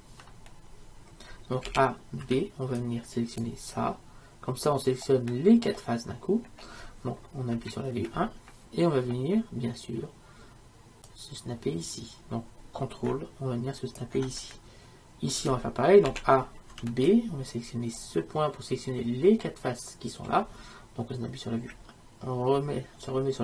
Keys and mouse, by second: 1.7 a, 5.1 middle click, 7.6 KP_1, 16.1 a, 19.4-21.6 middle drag, 21.6 KP_1.